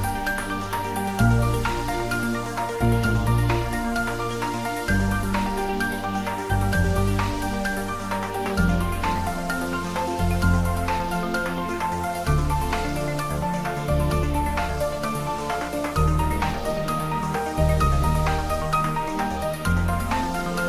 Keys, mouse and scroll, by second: 0.1 shift+click, 1.7 ctrl+z, 2.5 click, 4.2 ctrl+z, 4.9 shift+click, 6.1-6.4 scroll down 1, 8.3 shift+d, 8.8 r, 16.2 click, 16.9 g.